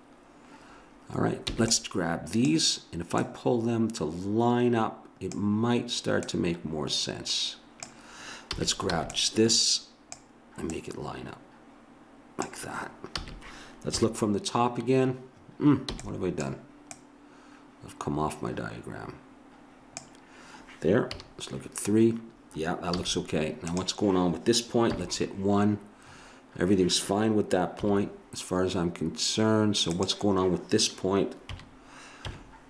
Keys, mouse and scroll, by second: 1.5 b, 3.1-4.8 drag, 5.0 b, 6.2-7.9 drag, 8.6 a, 8.9 b, 10.7 click, 13.2 a, 13.9 KP_1, 15.9 b, 21.1 KP_3, 22.9 a, 24.9 KP_1, 27.8 KP_3, 29.9-31.2 middle drag, 31.2 click, 31.5 KP_3, 32.2 KP_1.